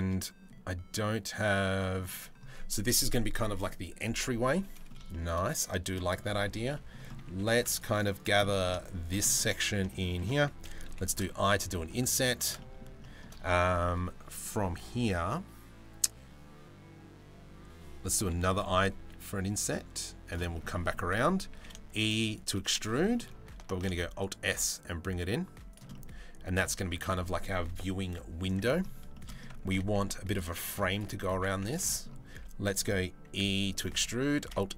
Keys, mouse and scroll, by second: 1.1 middle click, 4.1 middle click, 4.7 shift+middle click, 5.0 middle click, 6.2 Tab, 6.3 middle click, 7.0 3, 8.0 middle click, 8.9 middle click, 9.5 shift+middle click, 12.2 middle click, 20.1 shift+middle click, 20.3 middle click, 21.1 e, 22.6 middle click, 23.3 alt+s, 25.5 middle click, 26.4 Tab, 28.0 Tab, 28.7 shift+middle click, 29.3 2, 29.9 alt+click, 31.2 alt+click, 31.5 middle click, 32.9 e, 34.0 alt+s.